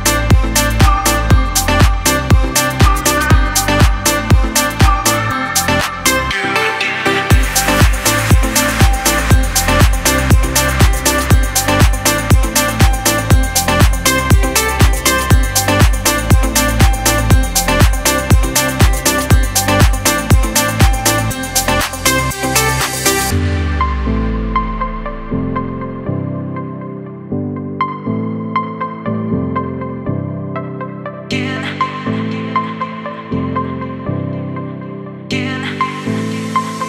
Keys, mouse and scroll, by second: 0.4 click, 3.3 Right, 6.5 click, 6.9 space, 7.0 click, 7.4 space, 8.4 alt+scroll down 1, 8.5 space, 8.6 click, 9.0 space, 9.4 click, 12.5-22.3 drag, 22.3 ctrl+c, 23.7 click, 25.0 t, 26.6 click, 28.0 ctrl+v, 29.4 click, 32.6-36.8 drag.